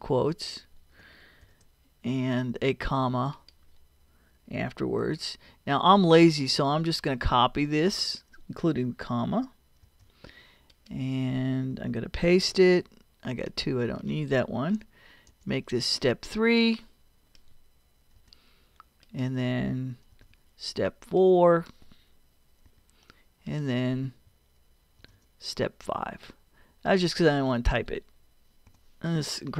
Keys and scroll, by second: 1.4 shift+', 5.0 ,, 9.8 super+c, 12.3 super+v, 15.3 BackSpace, 18.2 3, 20.1 super+v, 22.7 4, 25.0 super+v, 28.7 5.